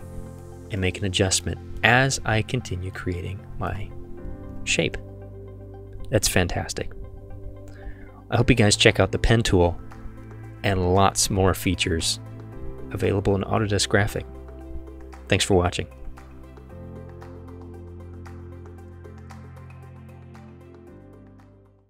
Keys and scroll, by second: 3.2 v.